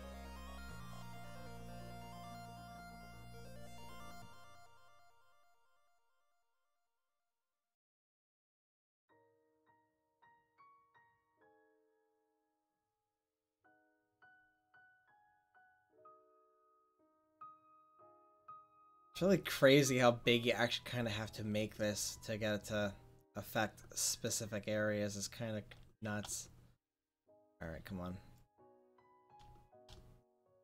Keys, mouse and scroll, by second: 1.7-4.9 drag, 4.9 middle drag, 6.9 click, 6.9-9.1 middle drag, 9.1-9.7 drag, 13.3 middle click, 14.4-17.2 drag, 14.4-17.2 middle drag, 18.2 f, 19.8 click, 20.3 click, 21.4-24.2 drag, 24.5 middle click, 25.1 click, 25.2-25.6 middle drag, 28.6 middle click, 29.2-30.6 middle drag.